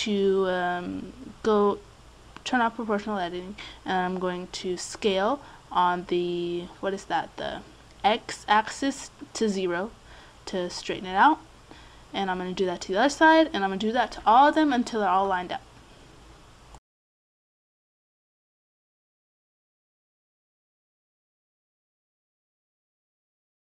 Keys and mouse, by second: 4.6 s, 5.1 a, 5.8 c, 10.7 right click, 10.8 s, 11.0 a, 11.1 c, 13.2 s, 13.4 a, 13.8 c, 15.8 s, 16.2 a, 16.3 c, 18.2 click, 18.3-20.5 typing, 21.5 a, 21.7 a, 21.9 a, 22.7 click.